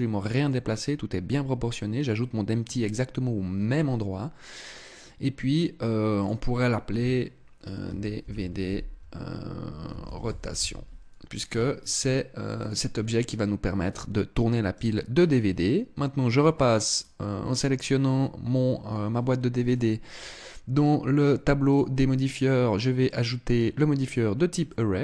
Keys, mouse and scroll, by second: 5.7 click, 14.3 right click, 16.5 right click, 19.3 click, 21.2 click, 24.2 middle click.